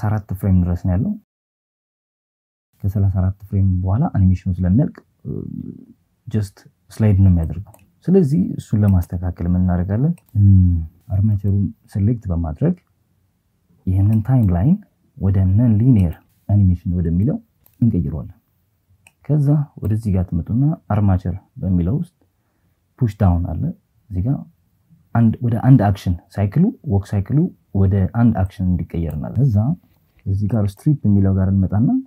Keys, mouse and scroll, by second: 2.5 click, 3.1 click, 4.5 click, 5.5-6.5 drag, 7.3 right click, 10.0-11.0 drag, 11.8 click, 12.3 click, 13.7-15.5 drag, 16.8 click, 26.1-27.2 drag, 29.6 click.